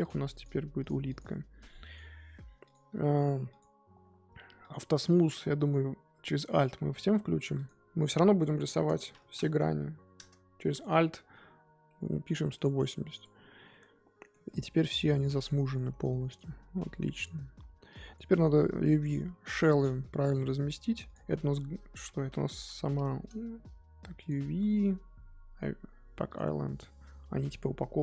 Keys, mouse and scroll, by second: 0.0 click, 2.7 shift+click, 5.5 alt+click, 6.7-10.1 middle drag, 10.1-11.8 drag, 11.8-13.2 middle drag, 13.2 click, 13.7-14.5 middle drag, 14.5 click, 14.8 click, 15.9-16.3 middle drag, 16.3 click, 17.1 click, 17.6 scroll down 2, 18.1 click, 19.0 click, 20.0 a, 21.1 click, 22.5 l, 26.3-27.5 drag.